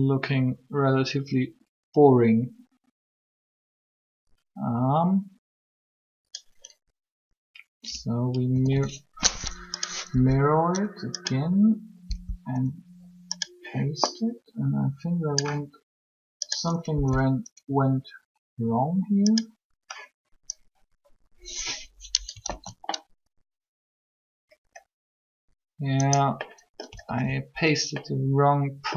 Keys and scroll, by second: 8.5 a, 8.6 a, 10.1 Up, 12.0 Up, 16.8 Up, 22.4 alt+a, 26.9 alt+a.